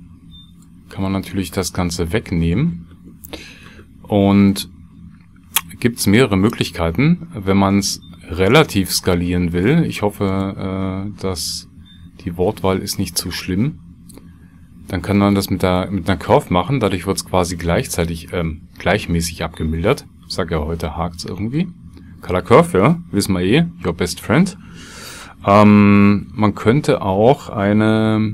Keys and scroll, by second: 5.5 shift+a, 26.8 ctrl+x, 27.9 shift+a.